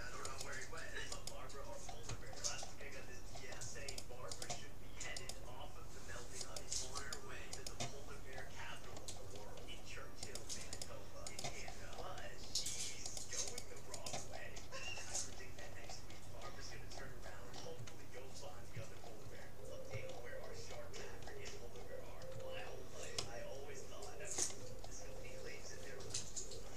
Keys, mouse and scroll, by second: 2.4-4.0 middle drag, 4.0-9.2 right drag, 8.0-10.2 middle drag, 10.2-12.8 right drag, 13.2-15.6 right drag, 15.6-16.8 middle drag, 23.2-25.0 middle drag.